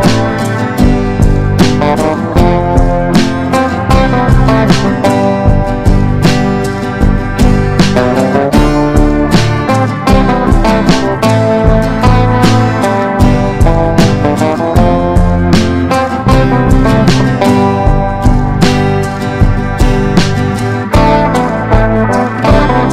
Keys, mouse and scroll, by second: 2.3 shift+click, 2.7 shift+click, 3.1 shift+click, 4.8 click, 7.7 Delete, 8.2 click, 8.4 Delete, 8.8 click, 9.0 Delete, 9.6 click, 9.9 Delete, 10.4 click, 10.6 Delete, 11.0 click, 11.2 Delete, 11.5 click, 11.7 Delete, 12.3 click, 12.5 Delete, 13.1 click, 13.3 Delete, 13.8 click, 14.0 Delete, 14.6 click, 14.8 Delete, 15.2 click, 15.4 Delete, 16.0 Delete, 16.5 click, 17.3 Delete, 19.7-22.9 drag.